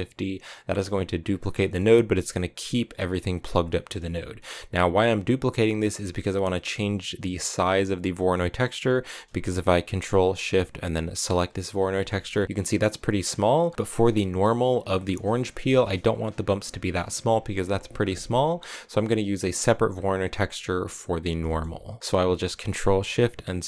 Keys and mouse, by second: 1.2 click, 1.5 middle click, 1.9 click, 3.7 middle click, 4.1 click, 7.5 middle click, 8.1 middle click, 11.2 ctrl+shift+click, 11.8 shift+click, 13.8 middle click, 18.5 click, 19.8 click, 21.4 middle click.